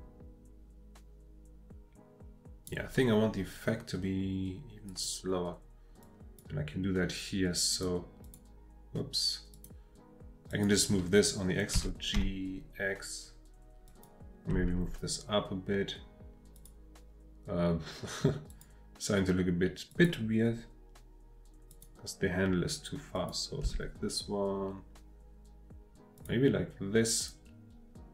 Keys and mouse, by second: 4.9 click, 6.0-6.4 drag, 7.7 click, 8.2 click, 9.5 click, 10.5 click, 11.7 g, 12.2 x, 13.9 click, 14.5 g, 16.6 click, 18.5 click, 19.9 click, 21.7 click, 23.1 click, 23.6 g, 26.2 click, 27.3-28.1 drag.